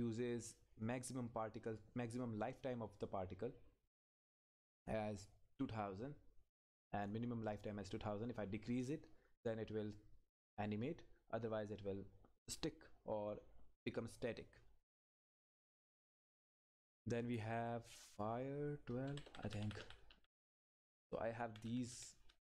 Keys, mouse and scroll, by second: 4.5 click, 8.7 click, 15.7 click, 19.1 Up.